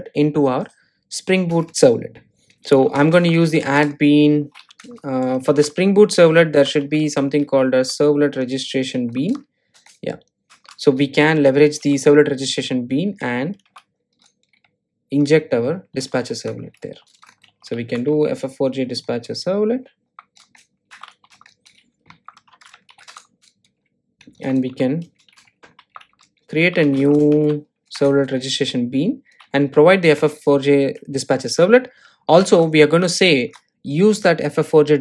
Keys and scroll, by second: 4.2 Return, 10.4 Return, 14.7 Return, 21.0 Return, 24.9 Return.